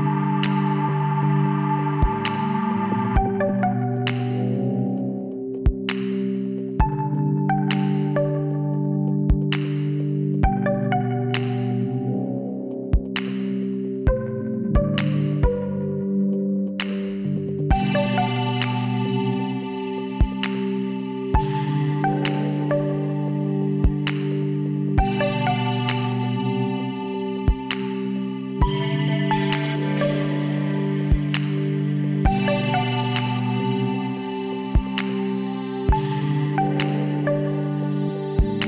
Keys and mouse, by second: 2.8 z, 3.4-4.9 middle drag, 5.4-7.2 middle drag, 8.3-9.4 middle drag, 9.4 KP_7, 12.5 middle click, 12.8 click, 13.8 l, 15.1-16.3 drag, 18.2 z, 18.7-20.5 drag, 21.0-22.9 middle drag, 23.0 shift+d, 29.1 shift+d, 33.1 b, 36.2 t, 37.3 KP_1.